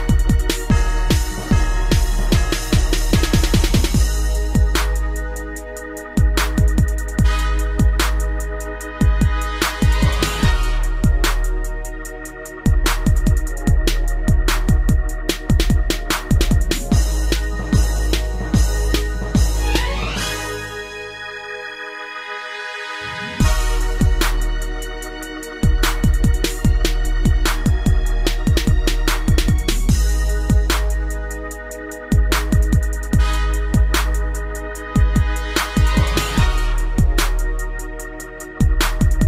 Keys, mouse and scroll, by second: 0.0 g, 1.5 click, 1.8 middle click, 2.9 click, 3.9 middle click, 5.1 click, 7.3 click, 7.4 click, 8.1 Right, 8.6 Right, 8.8 Right, 9.9 Left, 9.9 Down, 11.6 shift+click, 12.6 g, 13.1 z, 14.5 click, 14.9 middle click, 15.2 scroll up 1, 16.2 click, 17.9 a, 19.3 click, 20.8 click, 21.5 click, 23.2 click, 23.9 Escape, 24.5 click, 26.3 click, 26.6 middle click, 29.0 click, 29.1 click, 29.8 middle click, 31.6 click, 33.6 click, 35.4 click, 36.5 Escape, 37.3 click, 38.8 click.